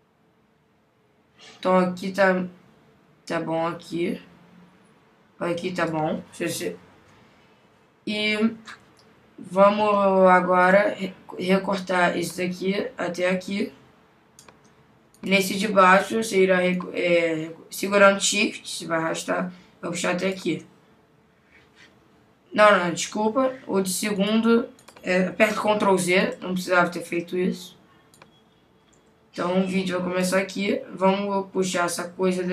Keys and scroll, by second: 25.7 super+z.